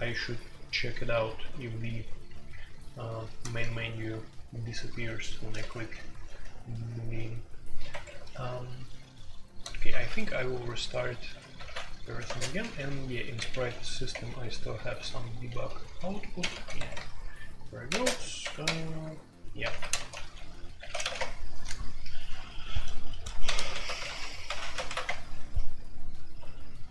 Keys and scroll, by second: 1.0-26.9 typing, 3.4 Tab, 5.9 Escape, 6.2 F2, 7.9 Escape, 8.1 F2, 9.9 alt+2, 11.6 alt+1, 14.1 Return, 21.1 Return, 23.4 ctrl+c, 23.7 alt+o, 24.0 alt+p, 25.0 Return.